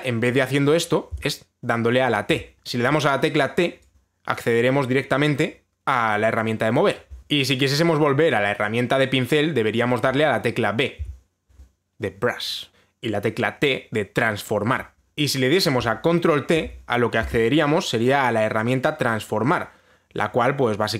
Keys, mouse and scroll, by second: 1.8 b, 2.6 t, 7.2 t, 11.7 b, 15.1 click, 15.1 b, 17.2 ctrl+t.